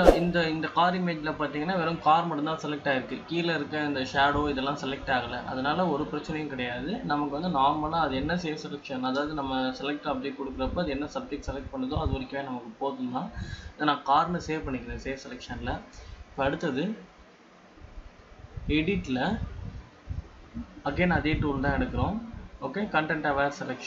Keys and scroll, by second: 23.6 ctrl+d.